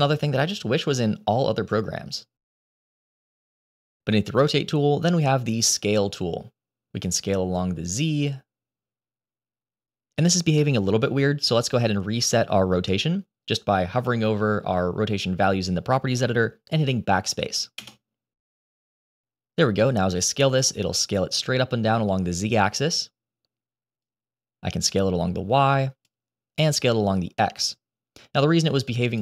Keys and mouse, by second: 5.7 click, 7.5 click, 7.7-10.6 drag, 17.7 BackSpace, 20.2-22.9 drag, 24.0 click, 24.2-25.9 drag, 26.9-29.1 drag.